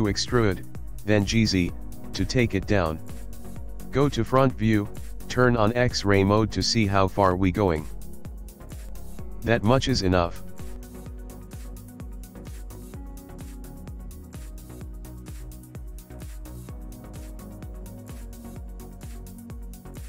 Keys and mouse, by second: 0.5 e, 3.2 KP_1, 4.7 click, 6.5 g, 9.3 middle click, 10.4 Tab, 10.9 middle click, 12.2 click, 13.1 middle click, 13.7 middle click, 15.1 click, 15.9 s, 19.2 middle click.